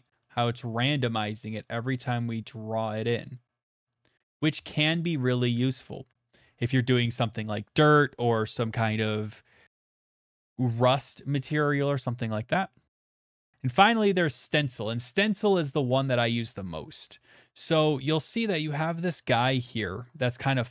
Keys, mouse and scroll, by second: 0.2 click, 0.5 click, 0.9 click, 1.2 click, 1.4 click, 3.2 scroll, 3.3 click, 4.3-9.4 middle click, 4.5 scroll, 5.6-6.2 scroll, 12.9 click, 13.3 click, 14.0 click, 15.0-16.2 scroll, 16.2 right click, 18.3-19.1 scroll, 19.2 scroll, 20.6-20.7 scroll.